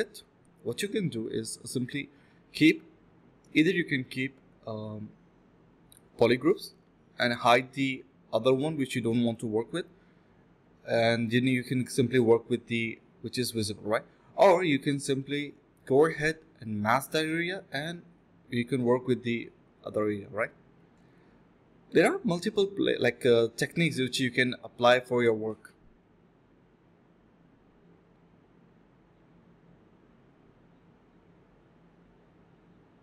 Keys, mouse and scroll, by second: 1.3 shift+click, 1.4 shift+double click, 1.4 shift+click, 3.9 ctrl+z, 5.0 alt+click, 5.5 shift+click, 6.2 shift+click, 6.3 alt+click, 6.5 alt+click, 7.5-8.0 typing, 10.1 alt+click, 11.7 shift+click, 12.2 f, 16.8 alt+click, 18.5 double click, 18.8 ctrl+b, 19.1-19.5 typing, 21.2 typing, 22.5 alt+click, 22.9 alt+click.